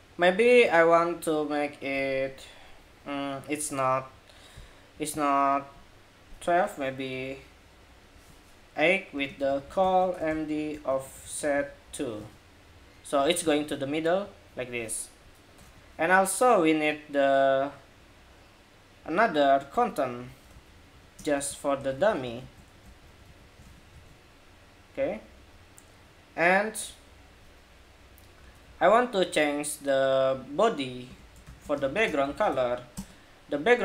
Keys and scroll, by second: 12.9 super+s, 13.2 super+Tab, 13.5 super+r, 15.3 super+Tab, 20.2 super+c, 21.1 super+v, 21.6 super+v, 22.2 super+v, 22.6 super+v, 23.0 super+s, 23.4 super+Tab, 23.6 super+r, 28.3 super+Tab.